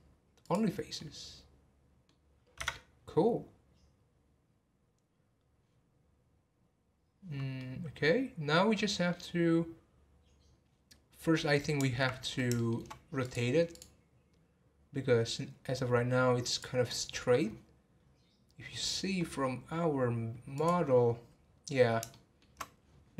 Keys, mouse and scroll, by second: 1.0-2.6 middle drag, 2.6 Tab, 3.0-5.8 scroll down 1, 5.8 scroll down 2, 7.5-10.3 middle drag, 10.3 scroll up 2, 11.4 middle click, 12.1 scroll down 1, 12.5 shift+middle click, 13.2-16.2 drag, 16.5-18.0 drag, 18.0-18.4 scroll up 2, 19.2-19.8 scroll down 12, 20.6 click, 21.0 scroll up 1, 21.4 scroll down 1, 22.1-23.1 shift+middle drag.